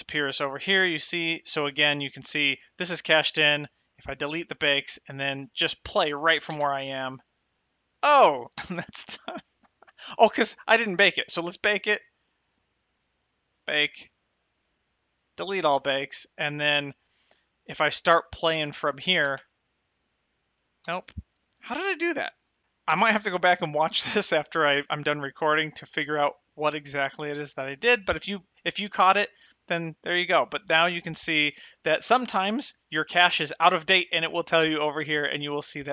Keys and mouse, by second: 4.4 click, 6.8 space, 8.9 space, 13.8 click, 15.7 click, 19.6 space, 21.1 space, 22.0 click.